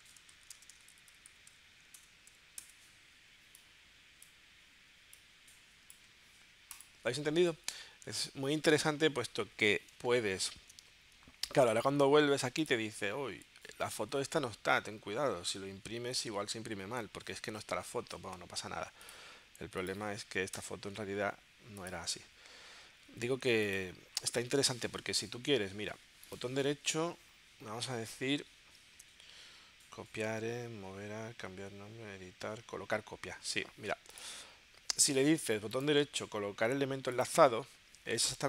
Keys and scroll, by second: 0.0-2.3 typing, 10.0 super+Tab, 20.6 BackSpace.